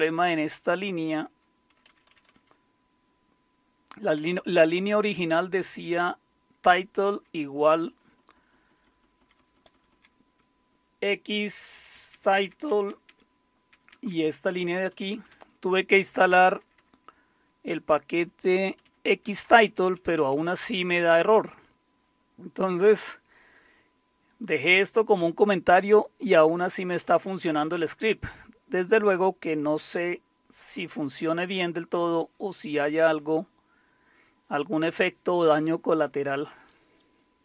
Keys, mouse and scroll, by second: 1.3-2.2 typing, 4.1 typing, 7.8-9.4 typing, 14.9-15.3 typing, 16.4-16.7 typing, 18.8-21.2 typing.